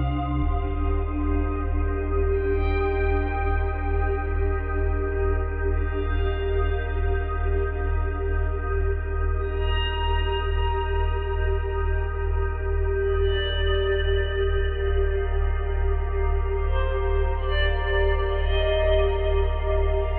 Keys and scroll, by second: 1.3 space, 2.7 space, 7.0 space, 9.1 space, 15.5 space.